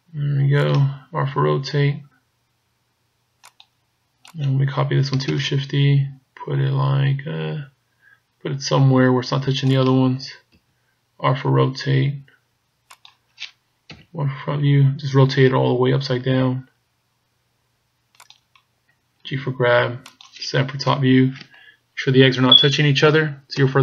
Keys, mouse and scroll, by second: 1.5 r, 4.3 right click, 5.4 shift+d, 10.6 r, 13.9 KP_1, 15.6 r, 19.3 g, 20.9 KP_7, 23.6 KP_0.